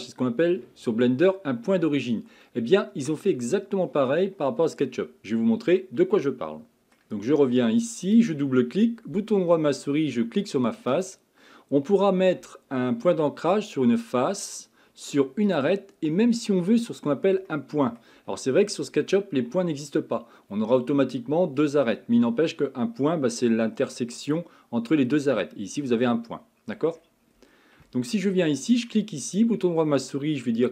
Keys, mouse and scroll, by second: 2.6-5.6 middle drag.